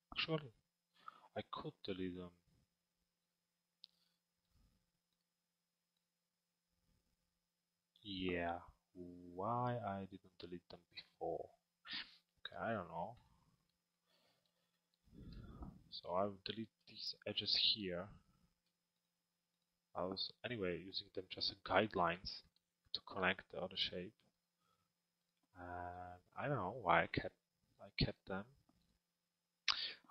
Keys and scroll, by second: 4.5 BackSpace.